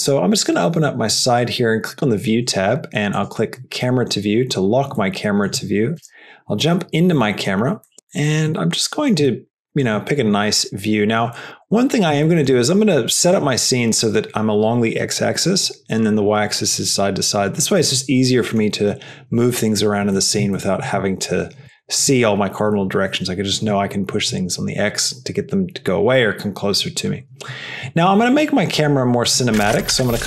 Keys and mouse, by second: 1.1 click, 3.1 click, 5.3 middle click, 6.1 KP_0, 8.0 middle click, 8.8 middle click, 9.2 shift+middle click, 10.3-11.2 middle drag, 11.3-12.9 shift+middle drag, 13.0 shift+middle click, 18.4 middle click, 21.9 shift+middle click.